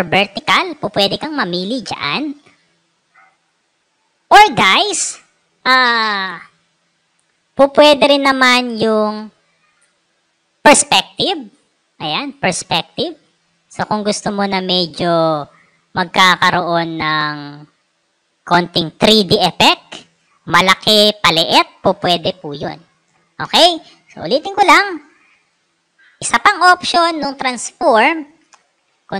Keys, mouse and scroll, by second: 0.7 click, 3.2 right click, 11.1 click, 12.4-13.7 drag, 15.9-17.0 drag, 19.1-20.1 drag, 22.5 Escape, 24.6 click, 25.4 click, 28.6 ctrl+t.